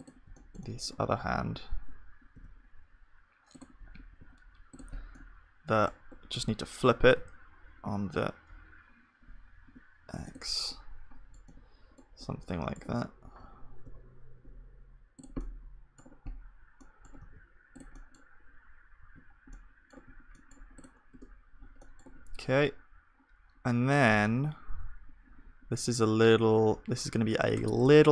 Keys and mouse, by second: 0.3-24.6 middle drag, 20.8 ctrl+s, 20.8-24.2 drag, 20.8-24.2 right drag, 21.1 Tab, 24.6-26.1 middle drag, 26.2 middle click, 27.6 Tab.